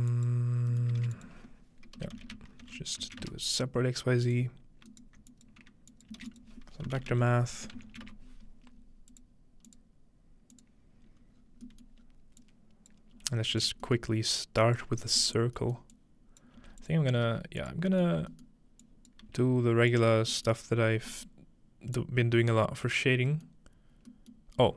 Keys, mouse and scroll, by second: 0.1-2.6 drag, 1.0-3.5 typing, 4.3-7.8 drag, 5.0 alt+right click, 5.5 right click, 6.2 alt+shift+a, 6.4-8.3 typing, 9.1 click, 9.7 click, 10.5 click, 11.1 scroll up 1, 11.4-12.1 scroll down 6, 12.4 click, 13.0-13.5 scroll down 1, 13.2 g, 13.5 click, 14.6 click, 15.0-16.4 scroll up 1, 15.9-16.4 drag, 16.6-17.3 typing, 17.6-21.7 drag, 17.9-19.9 scroll up 1, 19.2 typing, 20.2-20.7 scroll down 1, 20.5-23.1 middle drag, 20.7-22.7 scroll up 1, 22.7-24.0 drag, 24.0-24.7 scroll down 2.